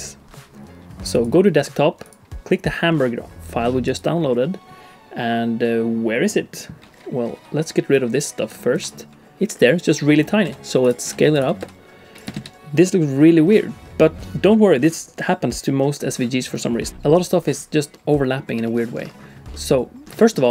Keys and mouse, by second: 8.1 click, 8.7 x, 9.3 a, 10.5 s, 11.0 s, 11.6 s, 12.3 shift+c, 12.6 click, 12.8-14.3 middle drag, 17.9 middle click, 18.6 shift+middle click, 19.5 middle click, 20.1 shift+middle click.